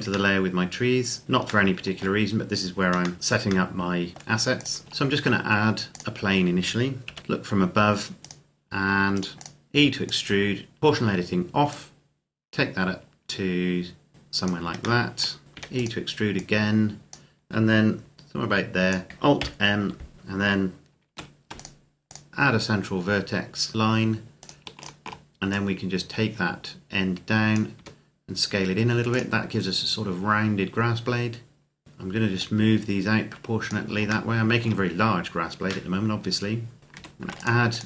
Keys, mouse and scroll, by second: 1.2 scroll down 1, 1.5 shift+middle click, 2.1-2.7 scroll up 1, 3.1 shift+middle click, 4.4 click, 4.8 shift+a, 5.9 click, 6.9 KP_7, 7.2-8.2 scroll down 1, 8.2 right click, 8.9 shift+right click, 9.3 click, 10.8 o, 11.5 click, 15.0 shift+middle click, 15.5 e, 15.7 click, 19.2 alt+m, 20.9 ctrl+r, 21.3 click, 24.2 right click, 24.6 shift+right click, 25.3 click, 27.5 s, 28.9 click, 31.8-32.2 scroll down 1, 32.5-33.7 drag, 34.1 shift+middle click, 35.2 scroll up 1, 36.8 ctrl+r, 37.2 click.